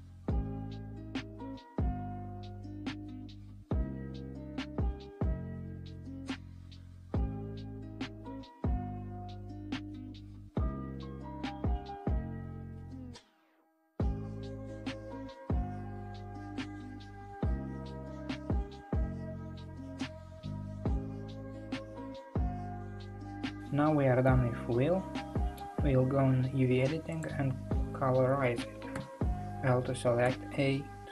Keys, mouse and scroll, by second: 0.9-2.7 middle drag, 2.8 ctrl+click, 4.0 shift+click, 4.6 f, 5.5 click, 6.6 shift+click, 7.3 f, 8.6 click, 9.6 click, 10.7 click, 11.0-13.1 middle drag, 13.1 ctrl+click, 13.9 f, 15.0 ctrl+z, 15.9 shift+click, 16.7 f, 18.0 click, 19.4 shift+click, 19.8 f, 20.5-23.1 middle drag, 23.1 click, 24.3-26.0 middle drag, 26.0 scroll down 1, 27.2 click, 30.3 a.